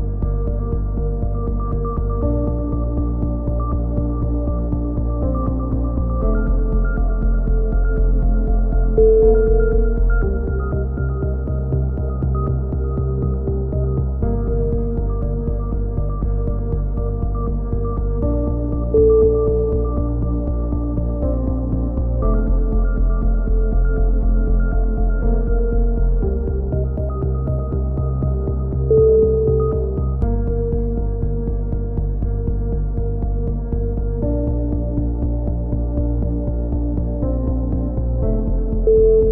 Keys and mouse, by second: 3.9 right click, 5.3 a, 5.7 c, 7.4 right click, 7.9 x, 9.7 middle click, 10.5 right click, 11.2-13.3 drag, 13.3-14.3 middle drag, 14.9-16.9 middle drag, 17.9 click, 18.7 a, 18.8-20.5 middle drag, 19.7 z, 20.2 z, 21.2 click, 22.0-24.9 middle drag, 28.4-30.1 right drag, 30.1-32.6 middle drag, 32.8-34.1 right drag, 34.2 alt+m, 35.6 click, 35.9-37.1 right drag, 37.1 alt+m, 38.5 a, 38.6 z.